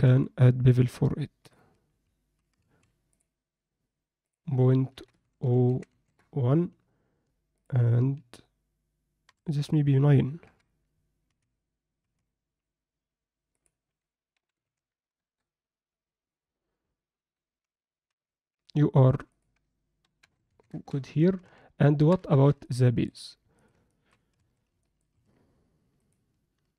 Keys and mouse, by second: 0.1 Tab, 0.8-1.6 drag, 2.8 ctrl+a, 4.3-6.1 drag, 7.6-9.6 drag, 10.5 KP_7, 11.3 z, 12.0 z, 13.6-15.2 drag, 18.1 z, 19.3-20.7 drag, 22.3 ctrl+alt+middle click, 22.6-23.1 middle drag, 23.9 ctrl+alt+middle click, 24.3 Tab, 24.8 middle click, 26.0 Tab, 26.0-26.7 drag.